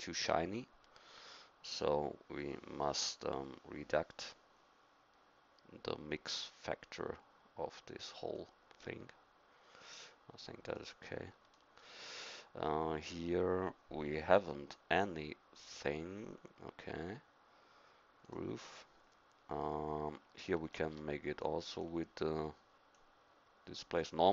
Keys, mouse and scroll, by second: 10.7 right click, 11.5-13.7 middle drag, 18.5-20.7 drag, 21.5 click.